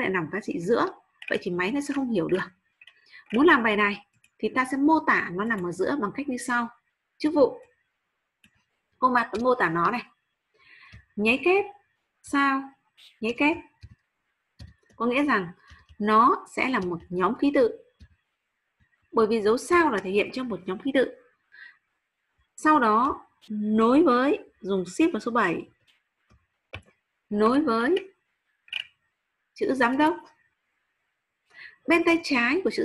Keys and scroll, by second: 11.3-12.3 typing, 16.1 shift+8, 18.0-19.7 typing, 25.7 shift+7.